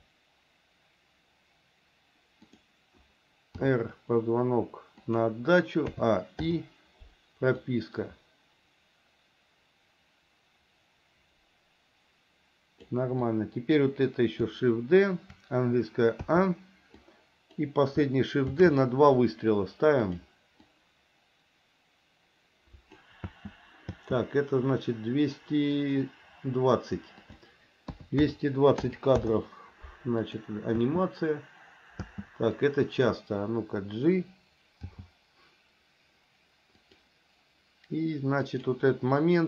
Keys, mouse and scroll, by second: 2.6 click, 3.8 r, 6.2 a, 6.7 i, 7.9-13.2 drag, 13.4 click, 16.5 a, 17.2 click, 18.8 shift+d, 20.9-23.3 drag, 23.5 space, 24.1 space, 27.5-29.4 drag, 28.4 KP_2, 30.5 click, 31.0 space, 32.3 space, 32.9 click, 35.1 g, 38.7 click.